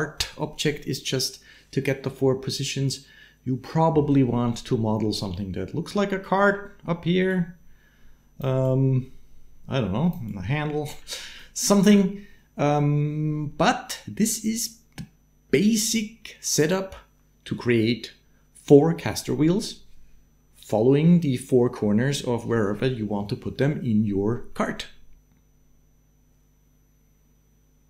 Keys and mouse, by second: 4.3 shift+middle click, 5.2 middle click, 6.1 shift+middle click, 6.8-8.4 d, 7.1-8.2 middle drag, 8.4-10.0 middle drag, 10.0 d, 10.1 click, 10.1 d, 11.1 d, 11.2 click, 11.7 d, 12.8 d, 25.0 space.